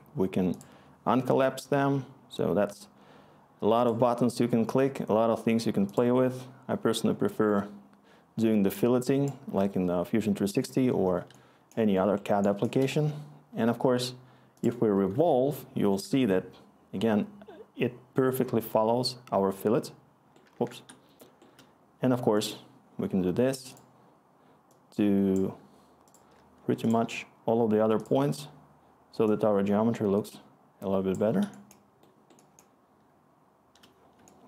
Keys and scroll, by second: 11.6-13.7 scroll, 13.7-14.7 scroll, 15.1-15.8 scroll, 19.7-20.4 scroll, 20.5 ctrl+z, 20.8 ctrl+z, 21.4 ctrl+z, 21.7 ctrl+z, 32.5-34.4 scroll.